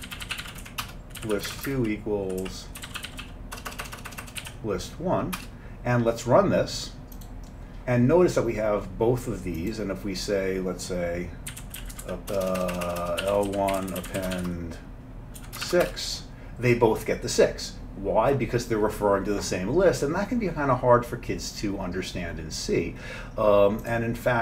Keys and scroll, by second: 0.0-5.9 typing, 11.3-14.4 typing, 15.4 typing, 15.9 Return.